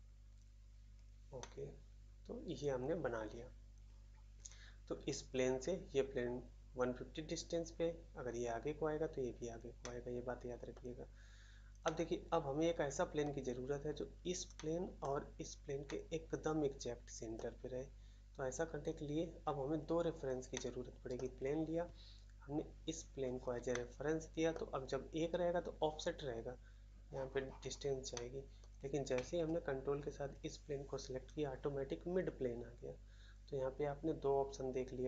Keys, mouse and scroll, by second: 1.3 middle click, 2.5 middle click, 2.5 middle click, 3.3 scroll down 1, 9.8 middle click, 10.7 middle click, 11.8 middle click, 13.2 middle click, 14.5 middle click, 15.0 middle click, 15.8 middle click, 17.3 middle click, 20.5 middle click, 21.1 middle click, 21.7 middle click, 23.7 middle click, 24.5 middle click, 28.1 middle click, 28.6 middle click.